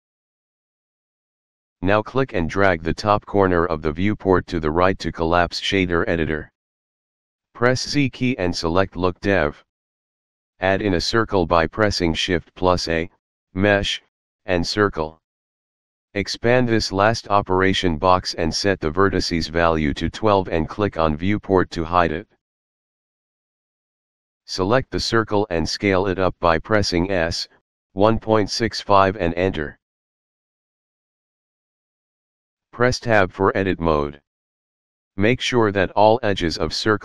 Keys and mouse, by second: 3.3 click, 7.6 z, 8.9 click, 12.2 shift+a, 14.4 click, 17.0 click, 18.3 click, 19.5 KP_1, 19.9 Return, 21.9 click, 23.8 click, 27.6 s, 28.9 KP_1, 29.3 KP_Decimal, 29.7 KP_6, 30.0 KP_5, 30.7 Return, 33.5 Tab, 36.0 e.